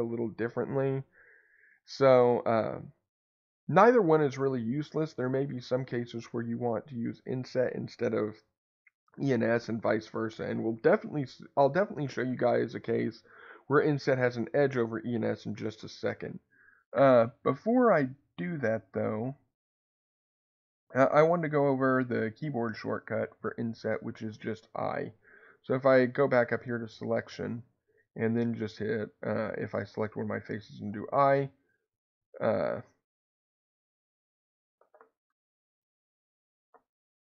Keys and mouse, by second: 26.3 click, 29.7 click, 35.2 Escape, 37.0 i.